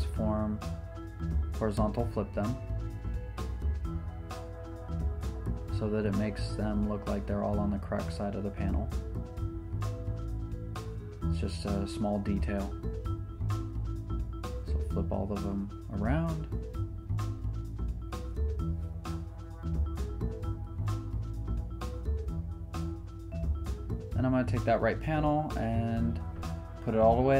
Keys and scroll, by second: 0.2 super+Return, 0.4 super+d, 1.2 super+t, 2.0 super+d, 2.4 z, 10.6 m, 13.4 super+t, 14.5 super+Return, 14.6 super+d, 14.9 super+t, 18.1 m, 20.5 super+t, 21.8 super+Return, 21.9 super+d, 24.8 shift+r, 25.4 shift+p, 26.0 shift+r, 26.8 Return.